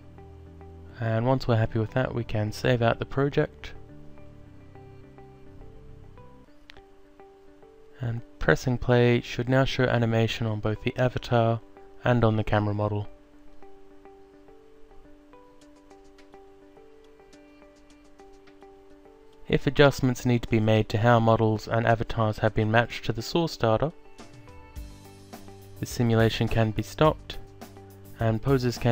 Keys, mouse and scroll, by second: 1.5 click, 2.7 click, 4.5 click, 5.4-6.3 typing, 11.6 click, 13.6 click, 14.9 alt+click, 22.7 alt+click, 25.4 click, 26.8 click, 28.1 alt+click.